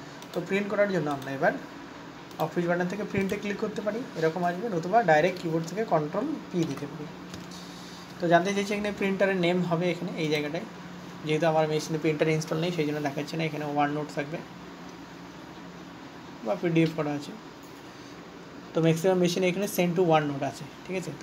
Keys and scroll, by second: 7.0 ctrl+p.